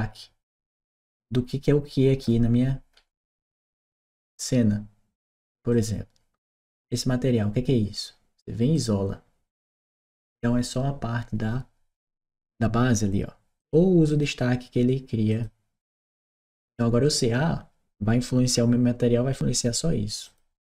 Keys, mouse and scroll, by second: 2.7 scroll down 1, 5.5-6.6 drag, 8.6 click, 13.4 click, 13.9 click, 15.1 click, 16.5 click, 20.1 click.